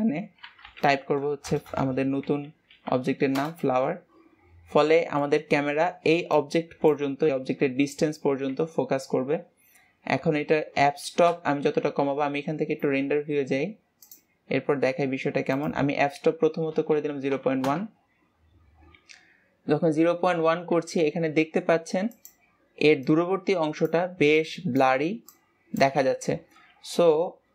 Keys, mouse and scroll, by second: 3.7 BackSpace, 5.0-5.3 scroll up 2, 5.3-11.7 shift+middle drag, 11.7 KP_0, 12.6-13.9 scroll up 2, 14.5 click, 15.9-19.0 drag.